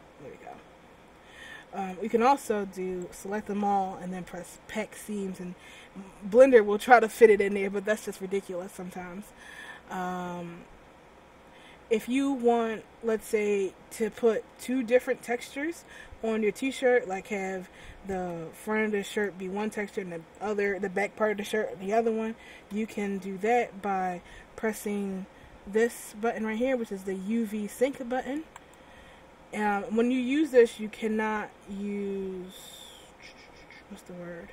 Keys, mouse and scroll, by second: 0.0 Tab, 0.6 Tab, 1.4 a, 1.8 a, 3.2 click, 8.0 ctrl+z, 12.2 middle click, 14.7 shift+middle click, 18.3 a, 19.1 right click, 20.5 right click, 22.9 a, 28.7 click.